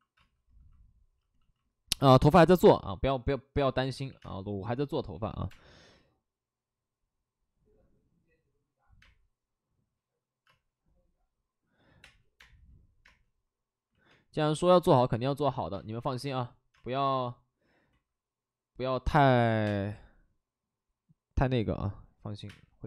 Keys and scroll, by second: 0.1 space, 3.5-5.4 typing, 10.4 space, 11.8 5, 11.9 space, 12.3 space, 13.8 ctrl+z, 14.1 space, 15.9 ctrl+z, 16.7 space, 16.9 ctrl+z, 19.4 ctrl+z, 19.4 3, 19.6 space, 19.8 3, 21.5 ctrl+z, 22.3 5.